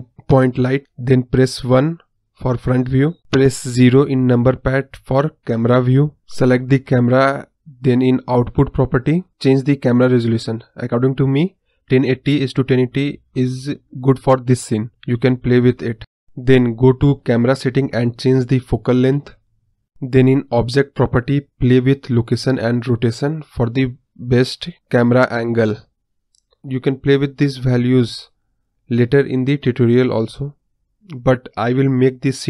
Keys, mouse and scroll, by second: 1.3 KP_1, 3.1 ctrl+alt+KP_0, 5.3 click, 7.5 click, 8.1-9.6 drag, 10.3-16.1 scroll down 1, 16.1 scroll down 1, 16.3 scroll up 1, 17.2 click, 17.6-19.2 drag, 19.7 click, 22.1-23.6 drag, 24.9-26.5 drag, 27.9-30.1 drag.